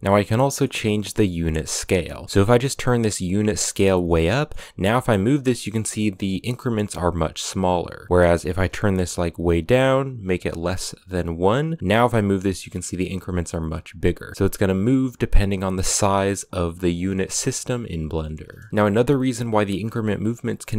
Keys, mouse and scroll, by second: 0.2-2.6 middle drag, 2.6-4.1 drag, 4.1 middle click, 4.5 g, 8.6-11.8 drag, 11.8 g, 18.7 g.